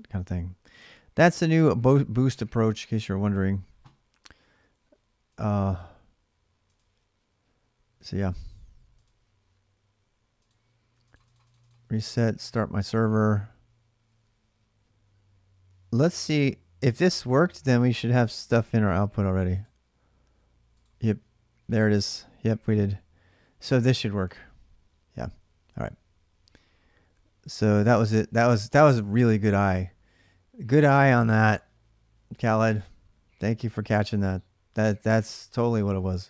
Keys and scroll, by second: 0.5 alt+Tab.